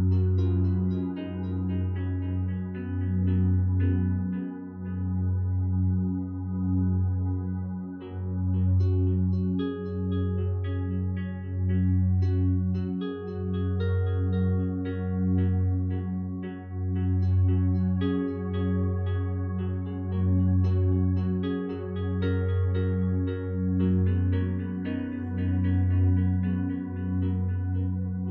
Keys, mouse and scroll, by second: 23.0 2, 23.2 4, 23.5 Return, 27.3 1, 27.6 3, 27.8 Return.